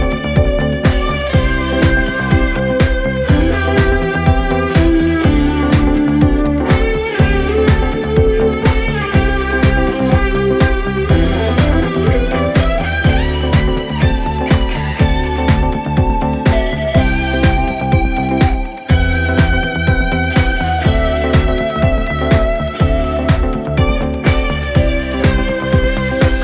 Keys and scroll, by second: 23.4 Delete.